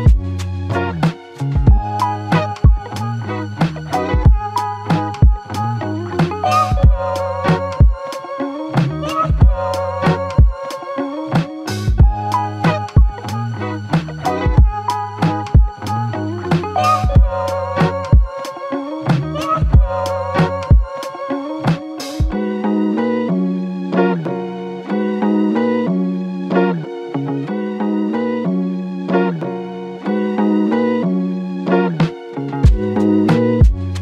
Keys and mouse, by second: 2.7 shift+click, 5.0 ctrl+click, 7.8 double click, 8.3 shift+click, 15.7 f, 16.7 double click, 21.5 alt+click, 22.2 alt+click, 22.2 ctrl+click, 23.7 ctrl+z, 29.5 double click, 29.8 alt+click, 32.6 double click.